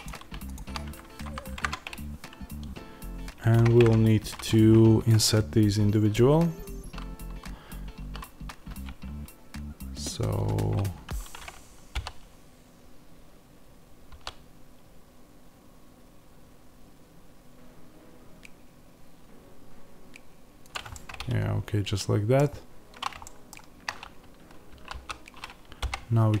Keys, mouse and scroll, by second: 3.7 shift+click, 11.8 i, 20.6 click, 20.8-26.4 middle drag, 24.7 s.